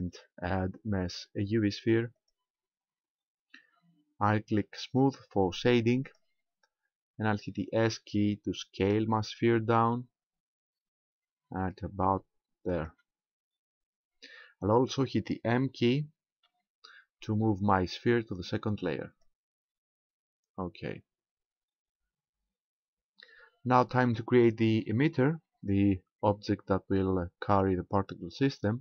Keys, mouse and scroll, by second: 6.1 click, 8.8 s, 12.8 ctrl+click, 13.8-14.4 scroll up 2, 16.5 m, 22.7-23.2 scroll down 3.